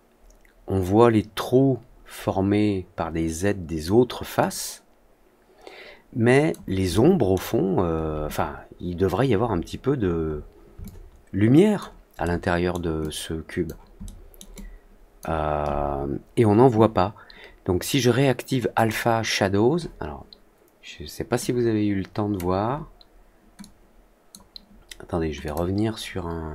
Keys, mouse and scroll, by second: 4.3-6.4 alt+drag, 6.9-7.3 alt+scroll down 1, 9.8-10.4 scroll up 2, 10.8 alt+click, 12.2-12.6 alt+scroll down 1, 12.9 alt+click, 14.0-14.3 alt+middle drag, 14.5-15.1 alt+drag, 18.7 click, 21.3 click, 23.5 click, 25.4 click.